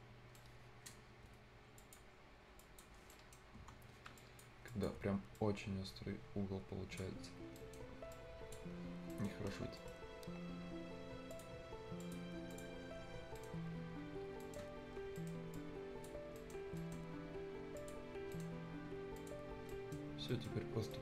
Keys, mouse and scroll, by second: 0.2 scroll down 1, 0.4 right click, 1.3 Delete, 1.4-1.8 scroll up 1, 1.8 click, 2.2-2.6 scroll up 1, 2.6 click, 2.9 scroll down 1, 3.1 right click, 3.6 F10, 3.7-4.2 scroll up 1, 4.2-7.2 drag, 7.2 scroll down 1, 7.4 scroll up 1, 7.6 right click, 8.1 click, 8.9 scroll down 1, 9.1 right click, 9.3 Escape, 9.4-11.3 scroll up 2, 9.5 Escape, 9.8 middle click, 11.3 click, 13.2 click, 13.2 scroll up 1, 13.4 right click, 13.6 scroll down 1, 14.4 right click, 14.6 scroll down 1, 15.2 right click, 15.5 click, 16.2-16.8 scroll up 2, 16.4 right click, 16.8 right click, 17.8 click, 18.1 scroll up 1, 18.3 right click, 19.2 click, 19.6 scroll down 1, 19.7 right click, 20.0 scroll up 1, 20.3 right click, 20.5 scroll down 1, 20.7 scroll.